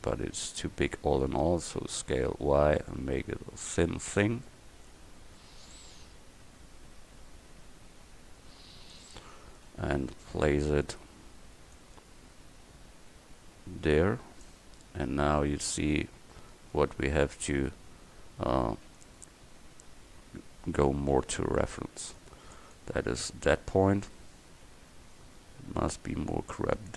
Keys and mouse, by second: 1.8 s, 4.8 click, 5.8-9.0 drag, 9.2 click, 9.2 middle drag, 10.4 KP_4, 14.9-16.6 middle drag, 20.1 Tab, 20.8 a, 21.8 c, 23.3 click, 24.7 g.